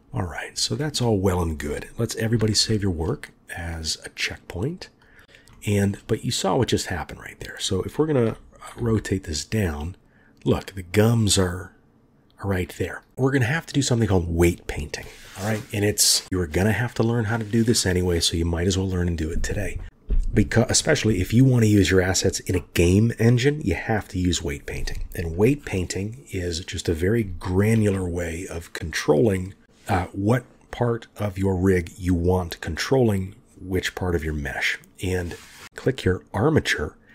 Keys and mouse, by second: 2.4 ctrl+s, 5.5-5.9 shift+drag, 6.1-7.3 drag, 8.3 r, 29.6 ctrl+z, 29.6 click, 35.6 click.